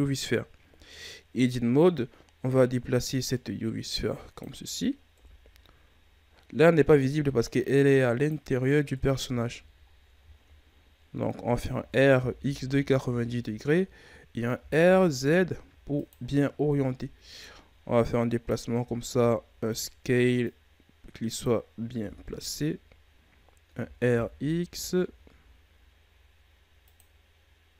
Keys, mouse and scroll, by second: 0.6 Tab, 1.7-5.1 drag, 5.1 KP_3, 6.9-8.9 drag, 8.9 KP_1, 9.8-11.4 ctrl+scroll up 8, 11.4 r, 14.5 r, 16.6 KP_3, 18.0 click, 18.8 s, 20.4 click, 22.0 KP_1, 23.3-23.7 scroll up 2, 23.7 r.